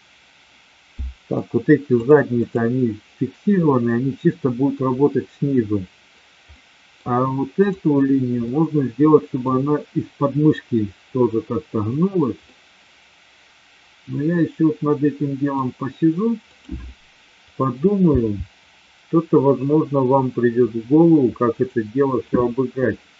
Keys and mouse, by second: 0.9-1.3 middle drag, 2.0-2.9 drag, 6.5-6.9 middle drag, 7.6-8.5 drag, 8.5-9.4 middle drag, 12.4-15.5 middle drag, 16.5 click, 18.0 g, 21.5 click, 23.0-23.1 middle drag.